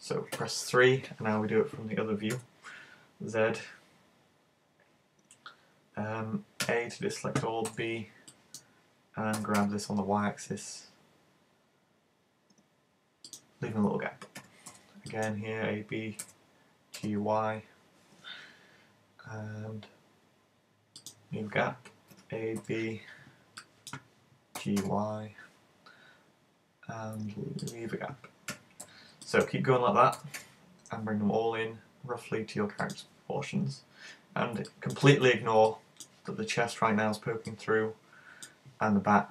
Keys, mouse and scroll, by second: 0.4 KP_3, 7.6 b, 13.4 click, 14.4 a, 14.7 b, 21.1 click, 22.2 a, 22.6 b, 27.7 click, 28.6 a, 28.8 b, 33.0 click, 34.7 middle click, 35.7 middle click, 37.5 middle click.